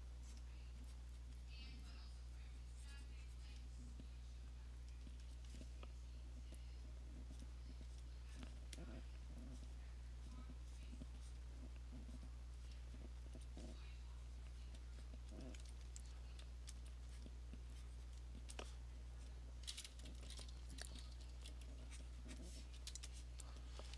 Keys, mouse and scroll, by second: 0.0 click, 0.4 click, 1.1 click, 1.3 click, 1.6 click, 2.0 click, 2.3 click, 2.5 click, 3.6 click, 5.0-5.4 alt+click, 5.3 alt+click, 6.7 click, 7.5 click, 8.1 click, 8.5 click, 8.7 alt+click, 9.7 click, 10.4 click, 10.9 click, 11.4 click, 12.3 click, 12.8 click, 13.4 alt+click, 13.9 click, 14.0 click, 14.7 click, 15.0 alt+click, 15.5 alt+click, 16.8 alt+click, 17.3 click, 18.2 click, 18.6 click, 18.8 click, 19.3 click, 19.7 alt+click, 21.0 [, 21.2 [, 21.4 [, 22.1 click, 22.4 click, 23.5 click, 23.6 click.